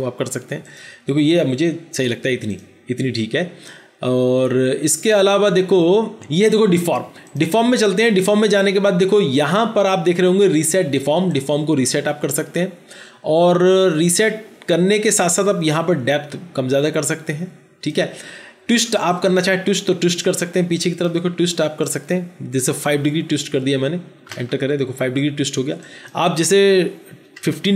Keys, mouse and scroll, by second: 22.8 KP_5, 24.2 Return, 27.2 KP_1.